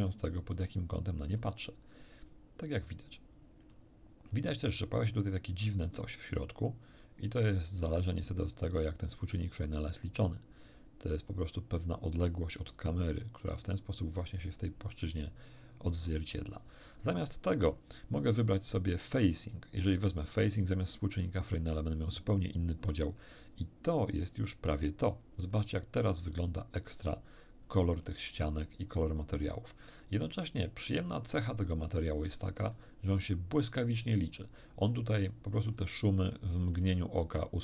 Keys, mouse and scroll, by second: 0.1-1.6 middle drag, 1.9-3.9 middle drag, 6.0-11.5 middle drag, 17.0 shift+middle click, 19.5-21.4 drag, 24.0-25.0 middle drag, 25.4-26.3 middle drag, 26.4-27.2 middle drag, 28.0-28.3 scroll up 1, 29.8 middle click, 32.0 scroll down 2, 32.7 middle click, 34.1 scroll up 2, 35.6 scroll up 2, 36.8 shift+scroll up 2, 36.9 shift+middle click.